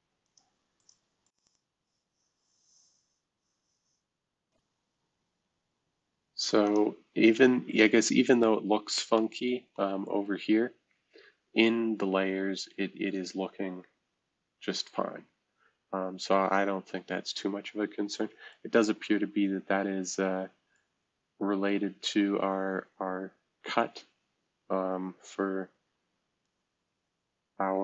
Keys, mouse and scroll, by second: 0.2 click, 0.8 click, 1.2 click, 1.7-2.2 drag, 2.2 click, 2.3 click, 2.4 click, 2.4 click, 3.3 click, 4.4-5.6 drag, 6.6-10.0 drag, 10.0-12.8 right drag, 12.8-14.3 scroll down 1, 15.0-17.6 scroll down 2, 17.6-19.7 right drag, 19.7-20.3 scroll up 1, 20.3-20.7 scroll down 1, 20.7-22.4 right drag, 22.4-27.8 drag.